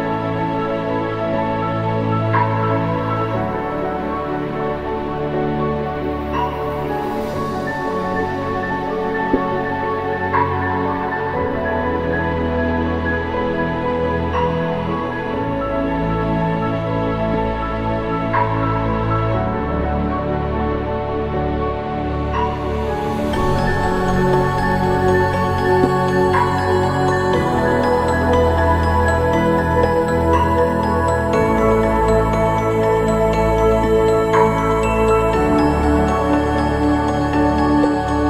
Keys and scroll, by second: 26.2 ctrl+-.